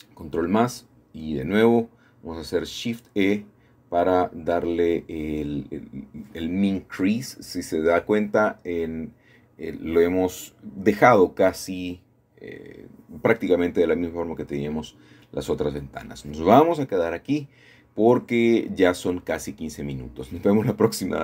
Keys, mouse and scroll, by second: 0.1 ctrl+KP_Add, 2.1 shift+e, 4.6-5.7 drag, 6.0-7.1 scroll down 1, 6.6 middle click, 9.1-11.4 middle drag, 11.6 middle click, 13.0 middle click, 13.5-13.9 scroll down 1, 13.9-14.3 scroll up 1, 14.3-16.4 middle drag, 20.0 ctrl+s.